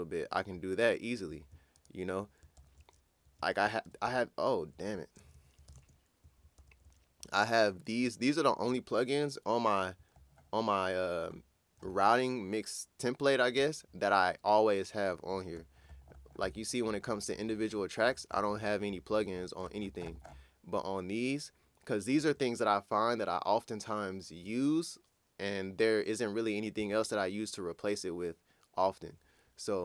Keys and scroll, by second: 2.6 ctrl+super+w, 6.6 ctrl+super+w.